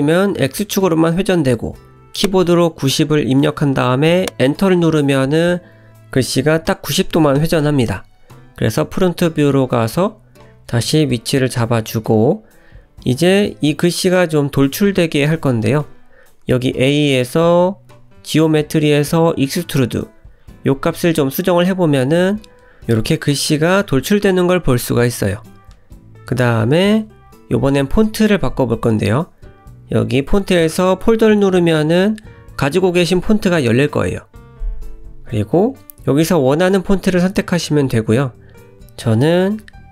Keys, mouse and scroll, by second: 3.7 scroll down 1, 3.9 middle click, 6.5 `, 8.3-8.8 scroll up 2, 8.8 g, 10.0-10.4 scroll up 1, 10.4 s, 11.3 g, 13.0-13.3 scroll down 2, 13.3 middle click, 14.3-15.0 scroll up 3, 15.0 middle click, 16.3 click, 17.0-17.5 scroll down 2, 17.5-18.0 scroll down 1, 18.1 click, 20.5 click, 22.6 middle click, 26.6 click, 28.1-28.7 scroll down 4, 30.1 click, 34.5 middle click, 36.8 click, 38.4 click.